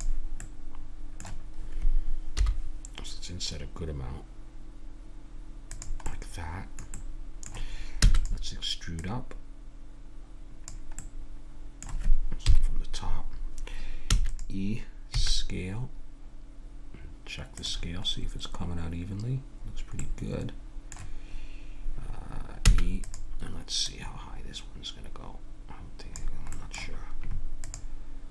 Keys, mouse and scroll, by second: 0.4-2.4 middle drag, 2.4 i, 6.1-7.5 middle drag, 8.0 e, 9.0-11.0 drag, 12.4 KP_7, 14.1 e, 15.1 s, 18.1-22.0 middle drag, 22.6 e, 23.9-25.6 drag, 26.5-28.3 middle drag.